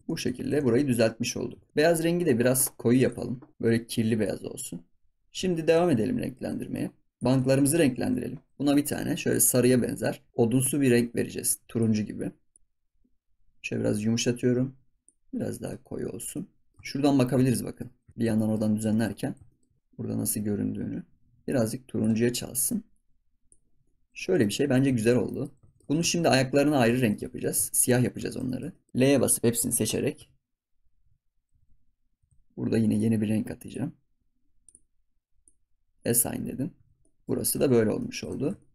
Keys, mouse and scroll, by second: 0.0 scroll down 8, 0.0 middle click, 0.6 ctrl+s, 0.7 scroll down 1, 0.9-1.4 middle drag, 1.4 scroll up 2, 1.6 shift+middle click, 1.7 ctrl+s, 3.0 click, 5.2 middle click, 5.2 scroll up 1, 5.5 shift+middle drag, 5.8 ctrl+s, 5.9 scroll up 3, 6.2-7.1 middle drag, 7.1 click, 7.5-7.9 scroll down 5, 8.3 g, 8.5 click, 9.2 click, 16.1 scroll down 10, 16.3 middle click, 17.2 scroll up 3, 17.5-18.7 shift+middle drag, 18.7 scroll up 2, 18.9 shift+middle click, 19.2 scroll down 1, 19.4 shift+middle click, 22.2-22.6 scroll down 3, 22.6 middle click, 23.8-24.9 scroll down 5, 24.9 shift+middle click, 25.2 scroll up 1, 25.2 middle click, 25.6 ctrl+s, 25.7-26.3 scroll up 2, 25.8 shift+middle click, 26.3 Tab, 26.7 scroll down 1, 26.9 shift+middle drag, 27.2 ctrl+s, 27.4-28.0 shift+middle drag, 28.0 scroll up 2, 28.9-30.1 scroll down 3, 32.8-34.6 drag, 36.0 click, 36.3 scroll up 2, 37.0 shift+middle click, 37.4 scroll up 1, 37.8 scroll down 4, 38.0 middle drag, 38.3 ctrl+s, 38.5 shift+middle click.